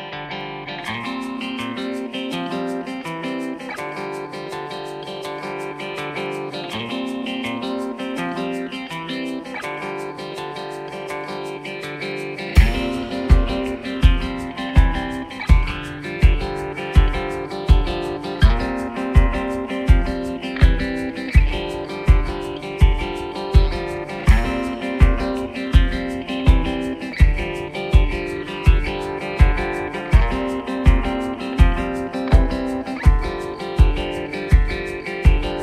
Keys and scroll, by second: 0.8 Caps_Lock, 2.0 ctrl+j, 8.0 typing, 10.2-11.0 typing.